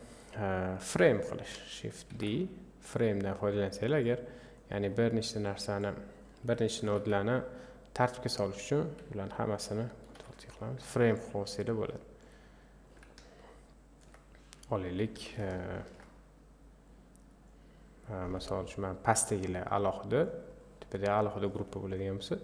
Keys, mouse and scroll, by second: 1.0 click, 2.1 shift+d, 6.3 click, 6.9 ctrl+t, 8.5-10.2 drag, 10.2 ctrl+t, 11.2 click, 14.7-15.9 drag, 15.9-17.7 ctrl+shift+right drag, 17.7 click, 18.6 click.